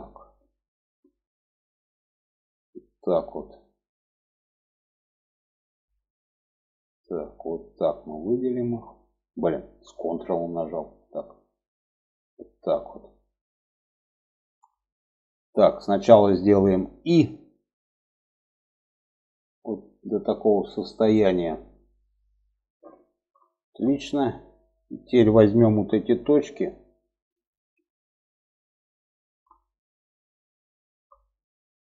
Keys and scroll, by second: 17.1 i, 25.0 1.